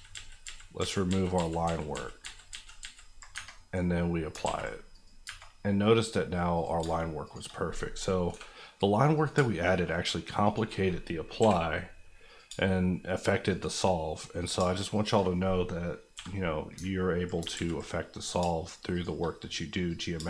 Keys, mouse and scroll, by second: 1.5 ctrl+z, 3.3 Tab, 4.5 ctrl+a, 4.9 click, 5.2 Tab, 6.5 click, 6.8 shift+click, 8.3 j, 9.1 click, 9.3 shift+click, 10.8 click, 11.4 j, 12.3 click, 12.4 shift+click, 13.9 click, 14.5 shift+click, 15.0 click, 16.1 j, 17.5 ctrl+z, 18.2 click, 18.4 shift+click, 19.3 click, 20.1 shift+click.